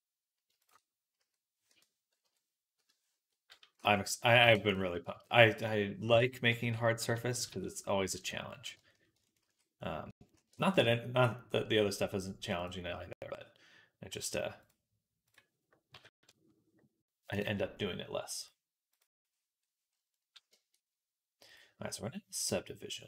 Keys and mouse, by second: 0.4 shift+click, 1.0 s, 2.1 ,, 3.6 s, 4.1-8.6 drag, 5.0 s, 7.3 s, 9.3 ctrl+s, 10.2 shift+a, 13.1-16.9 right drag, 14.4-16.9 drag, 18.3 right click.